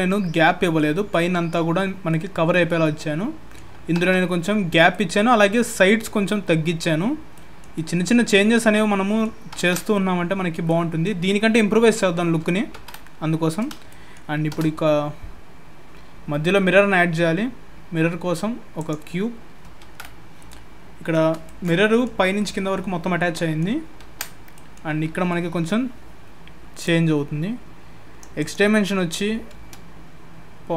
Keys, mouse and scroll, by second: 4.9 middle click, 7.7 alt+middle click, 8.5 middle click, 13.5 scroll up 1, 13.9 shift+middle click, 14.5 shift+a, 24.5 middle click, 26.8 click, 28.4 click.